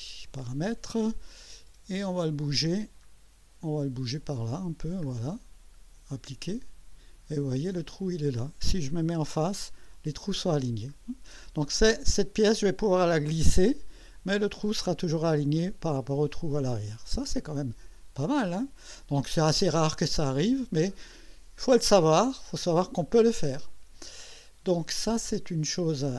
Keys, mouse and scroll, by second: 2.0 click, 2.6-3.0 scroll down 1, 3.7-5.2 scroll down 4, 6.4 click, 7.8 click, 9.2 2, 10.9 scroll up 2, 19.0-20.5 drag.